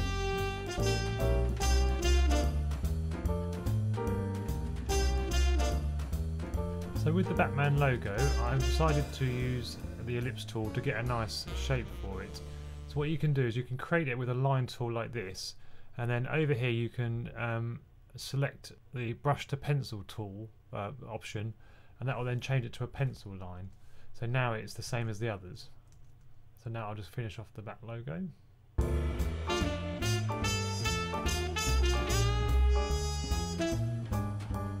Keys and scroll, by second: 0.9 super+z, 1.3 super+z, 2.0 super+z, 3.0 2, 24.8 super+z, 25.3 2, 25.5 2, 25.8 2, 26.0 2, 32.3 super+z, 33.6 super+z, 34.4 super+z.